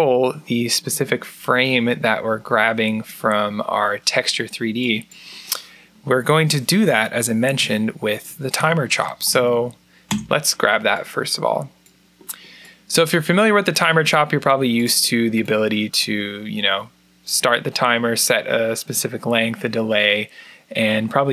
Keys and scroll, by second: 7.3 Tab, 8.4 Tab, 8.8-10.9 typing.